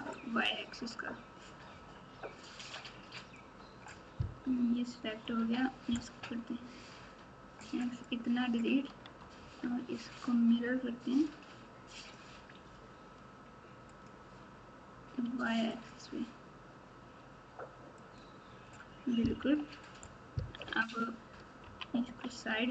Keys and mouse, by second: 0.3-3.3 drag, 4.4 KP_7, 6.7 x, 9.0 Tab, 12.0-14.0 drag, 15.7 click, 17.9 click, 19.4 KP_1, 20.5 KP_1, 21.6 KP_3, 22.0 KP_9, 22.4 Tab.